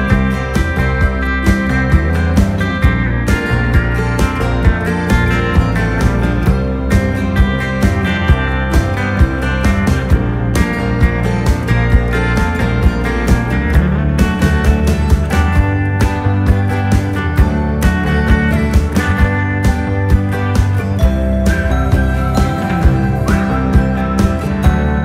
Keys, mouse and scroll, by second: 1.3-4.4 drag, 1.3 typing, 4.2 typing, 9.0-11.7 drag, 9.0 typing, 14.7 scroll down 1, 14.7 typing, 15.6 scroll down 1, 16.5-17.1 scroll down 1, 19.1-19.7 scroll down 1, 19.1 typing, 20.3 scroll down 1, 23.2 click, 23.2 typing, 24.8 typing, 24.9-25.0 drag.